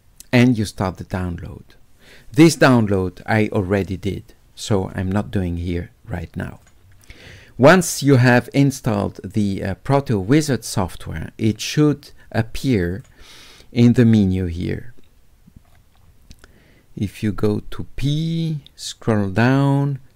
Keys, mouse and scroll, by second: 0.7 click, 6.5 click, 12.9 click, 14.5 click, 15.7-19.4 middle drag, 15.7-18.9 scroll up 1, 18.9-19.4 scroll down 1.